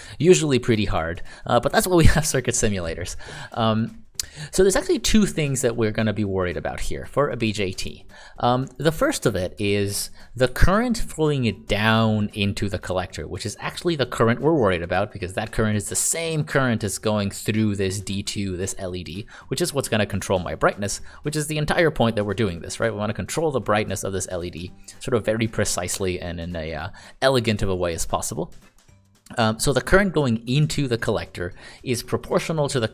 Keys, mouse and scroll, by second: 0.9 click, 8.7 click, 10.4 a, 11.5 click, 19.0 click, 27.9 click, 32.7 a.